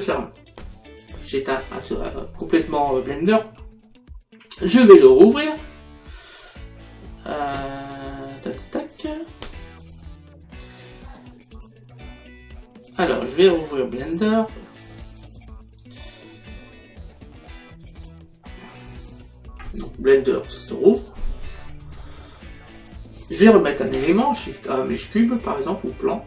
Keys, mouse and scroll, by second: 1.1 click, 5.5 click, 9.0 click, 11.2 click, 12.9 click, 17.9 click, 22.9 click, 24.1 shift+a.